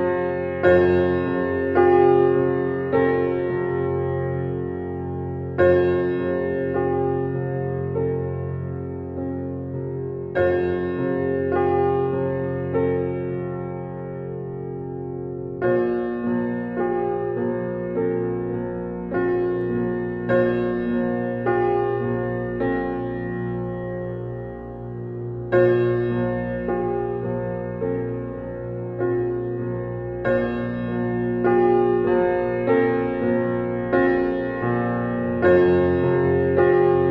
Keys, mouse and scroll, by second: 12.2 click.